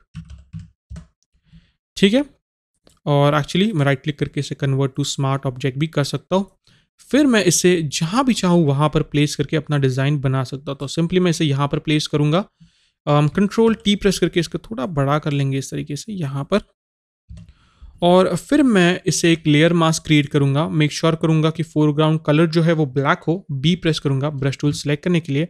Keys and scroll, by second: 17.4 Return.